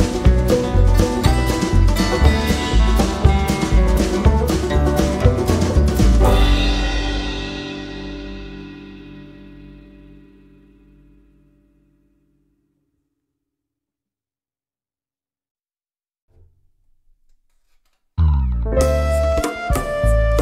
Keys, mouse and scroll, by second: 1.4 click, 2.6 click, 4.0 click, 4.6 click, 5.2 click, 6.5-7.6 drag, 8.8 F1, 10.7-12.6 shift+drag, 12.9 shift+click, 14.7 click, 17.5 KP_Subtract, 19.1 KP_Add.